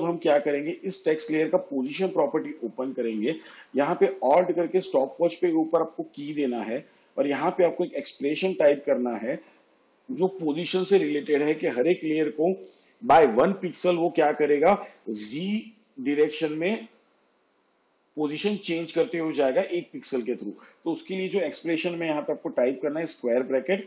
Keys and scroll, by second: 1.9 p, 23.1-23.8 typing.